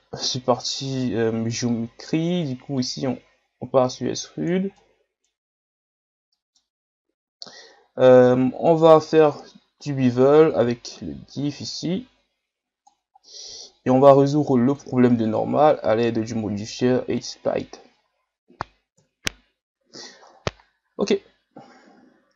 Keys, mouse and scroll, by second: 4.8-5.5 middle drag, 5.5-6.0 scroll up 1, 6.0 ctrl+scroll down 1, 6.3 middle click, 6.7 scroll up 2, 10.5-13.2 drag, 13.2-14.7 middle drag, 14.7-18.0 drag, 18.0 scroll down 4, 19.0 KP_1, 20.2-21.0 scroll down 4, 21.0 scroll up 2, 21.8 ctrl+scroll down 3, 22.2-22.3 scroll up 1.